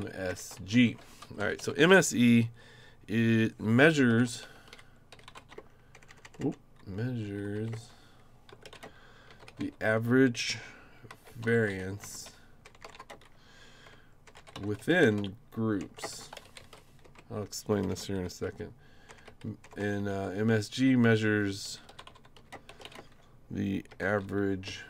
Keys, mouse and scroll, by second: 0.0-1.0 typing, 1.2 Up, 1.4 Up, 1.6 Right, 3.8-20.0 typing, 21.4-24.8 typing.